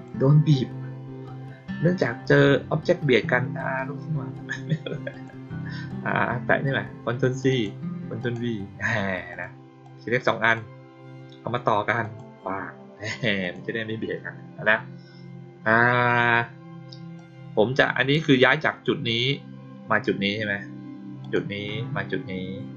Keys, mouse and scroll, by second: 5.0 click, 7.4 click, 8.1 click, 9.2 click, 9.8-10.5 drag, 11.9 click, 13.3 click, 17.1-18.1 drag, 21.1 click.